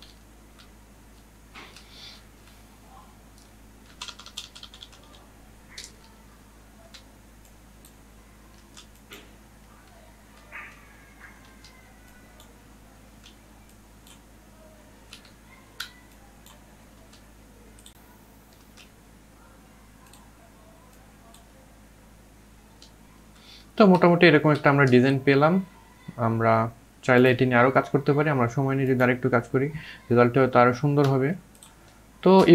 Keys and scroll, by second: 2.0-3.1 typing, 6.7 ctrl+z, 9.6 ctrl+alt+z, 11.2 ctrl+z, 13.0 ctrl+z, 15.1 ctrl+z, 17.9 ctrl+z.